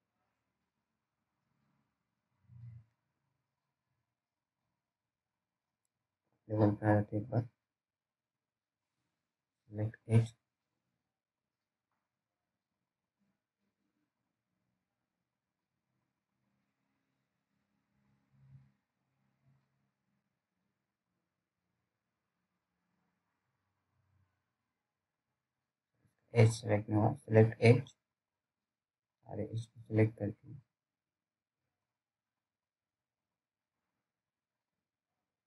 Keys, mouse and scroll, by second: 4.8 click, 5.6-6.0 scroll down 1, 6.1 alt+middle click, 6.5 alt+scroll down 1, 6.6-7.2 scroll up 1, 7.2 click, 7.7-8.7 scroll down 1, 10.0 alt+middle click, 11.1 scroll up 1, 12.8 click, 23.9-24.4 scroll up 1, 26.4 click, 26.4 scroll up 1, 26.5 click, 30.1 scroll up 1, 31.1-33.2 scroll down 1, 35.0-35.3 scroll up 1.